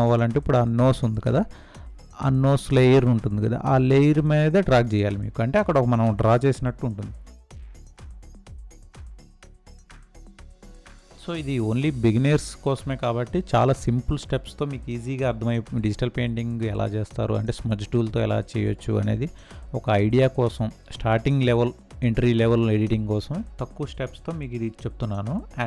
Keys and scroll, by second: 8.6 space.